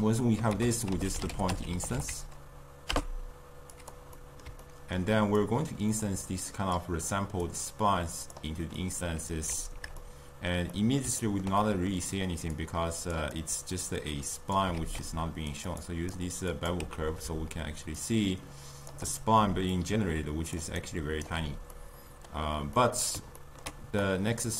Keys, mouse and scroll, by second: 0.5 ctrl+a, 4.2-5.4 middle drag, 5.4 click, 6.5 click, 7.5 click, 8.8-12.6 middle drag, 12.6 click, 14.0 click, 14.8 shift+d, 15.9-16.7 drag, 16.9 x, 18.0-19.5 shift+drag, 19.5 d, 19.8 click, 20.6 d, 20.8 right click, 21.3 d, 21.8-24.1 middle drag, 24.1 click.